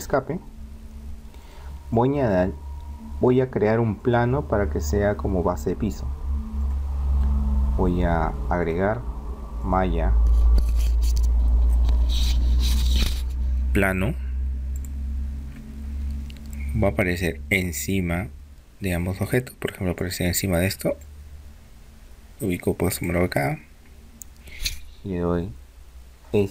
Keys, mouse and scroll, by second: 1.4-3.7 drag, 4.0-5.9 drag, 6.6-8.3 drag, 8.6-10.2 drag, 17.0-18.8 drag, 21.0-22.7 drag, 26.3 s.